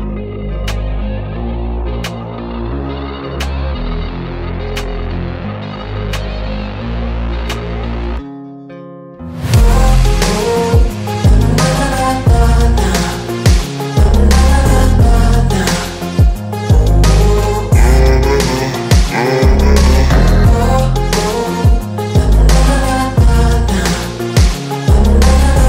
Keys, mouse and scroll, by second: 10.1 double click, 14.6 double click, 18.5 ctrl+z, 19.7 double click.